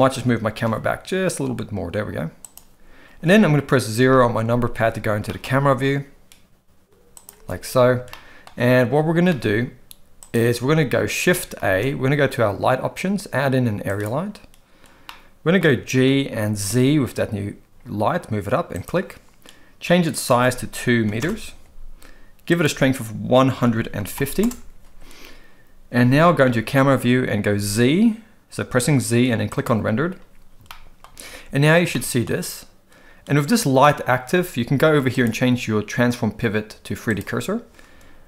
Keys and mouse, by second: 0.1 g, 4.0 KP_0, 5.2 g, 8.1-8.4 shift+middle drag, 9.2 g, 11.6 shift+a, 15.0-15.6 middle drag, 15.9 g, 20.3 click, 22.5-24.4 drag, 26.4 KP_0, 27.5 z, 30.7-31.0 shift+middle drag, 31.9-32.2 shift+middle drag, 35.2-37.2 drag.